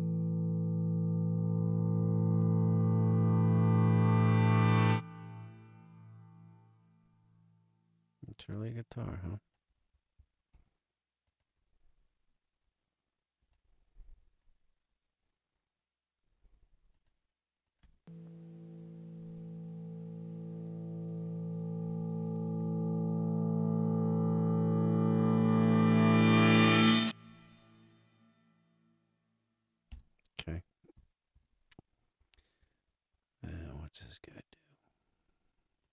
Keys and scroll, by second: 10.5 space, 17.8 space, 29.9 space, 30.9 super+space, 31.3 super+=.